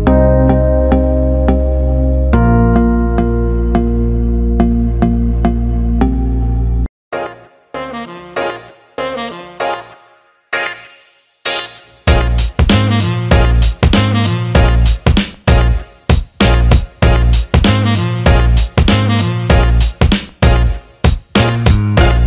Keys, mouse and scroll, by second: 0.0 click, 0.7 alt+middle click, 1.8-2.9 alt+middle drag, 2.9 alt+click, 10.2 click, 13.4-15.5 drag, 18.0 click, 20.0-22.1 alt+shift+middle drag.